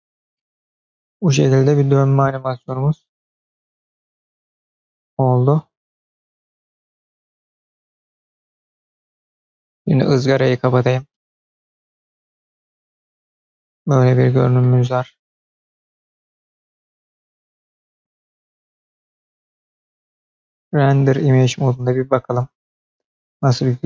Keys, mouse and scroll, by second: 9.6 space, 10.3 drag, 11.0-14.5 middle drag, 15.9-17.1 drag, 17.2 space, 20.4 space, 21.4-23.8 drag.